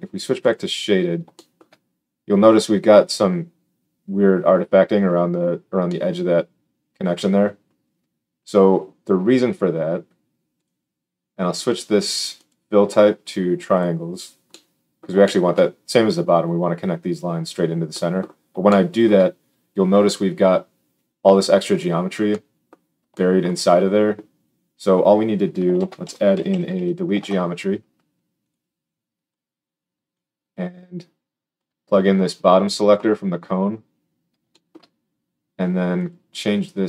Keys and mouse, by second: 0.5-10.5 drag, 10.5 middle click, 10.6-12.3 drag, 12.3-25.6 middle drag, 25.7 shift+a, 28.4-29.3 drag.